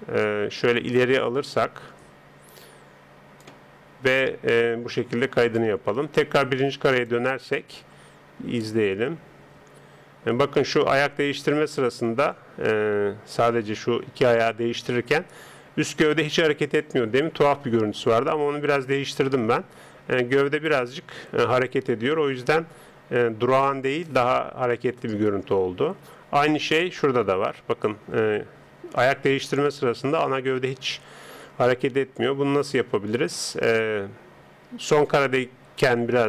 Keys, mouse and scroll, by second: 5.4-10.3 drag.